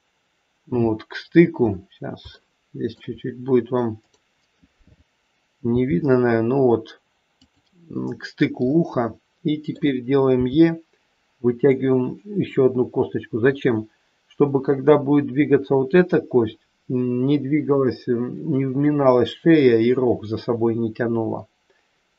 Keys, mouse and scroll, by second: 1.2 scroll up 3, 2.3 shift+middle click, 3.9 click, 5.8 g, 8.7 middle click, 10.3 e.